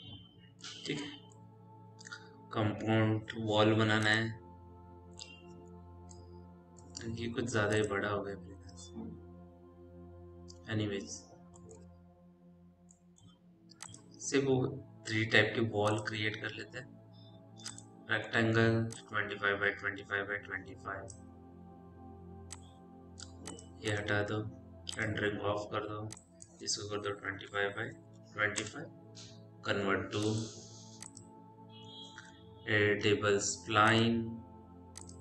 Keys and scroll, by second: 12.2 t, 27.3 5, 27.8 Tab, 28.0 2, 28.4 5, 28.4 Return, 33.9 e.